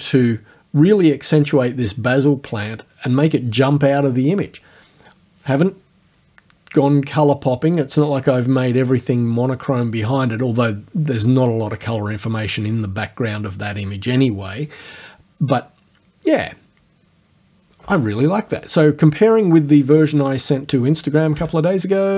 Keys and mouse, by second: 21.4 BackSpace.